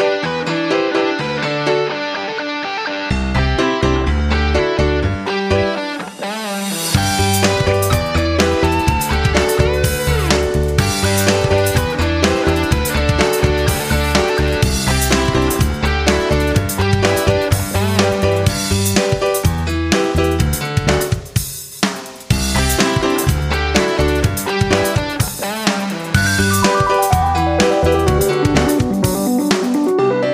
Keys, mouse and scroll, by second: 0.9 F9, 4.8 click, 8.5-10.2 typing, 10.3 Return, 11.8 click, 13.3 F9, 13.7-14.4 typing, 15.5-15.8 typing, 16.1 Return, 18.4 click, 23.4 F9, 23.8 click, 28.3 right click, 28.8 right click.